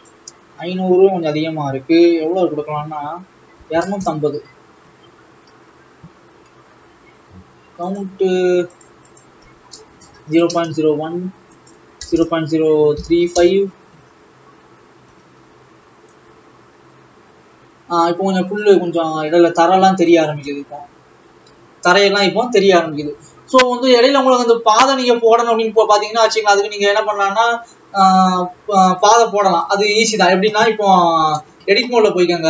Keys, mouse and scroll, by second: 4.0 click, 5.3-5.9 scroll down 3, 8.8 click, 10.5 KP_0, 13.4 click, 14.3-15.6 scroll up 6, 15.9 alt+a, 16.5-17.6 drag, 20.7 click, 24.2-24.5 scroll down 2, 28.0-30.8 drag, 31.1 scroll down 2, 32.0 scroll down 2, 32.2 Tab.